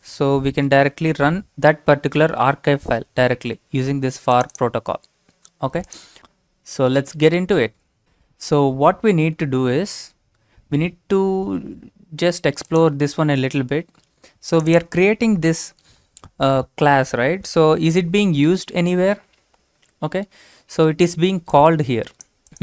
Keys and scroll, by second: 17.5 ctrl+c.